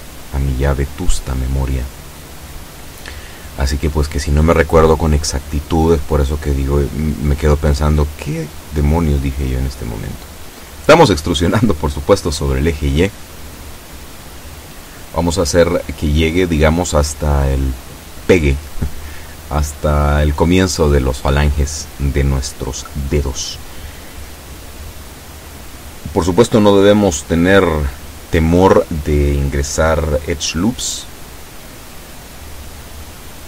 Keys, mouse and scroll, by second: 3.9 e, 21.1-22.3 drag, 32.3-33.4 drag.